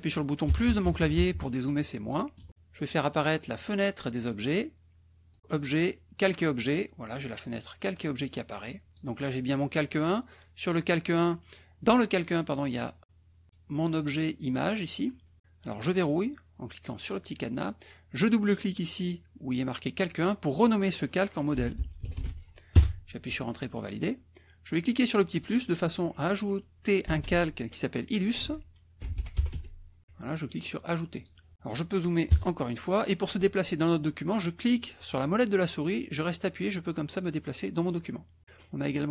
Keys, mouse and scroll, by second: 0.5 KP_Add, 1.6 KP_Subtract, 2.4 KP_Add, 5.3 click, 6.4 click, 8.5 click, 17.1 click, 20.1 click, 21.3-22.7 typing, 25.0 click, 26.8-29.5 typing, 31.1 click, 32.2 KP_Add, 35.0-38.4 drag.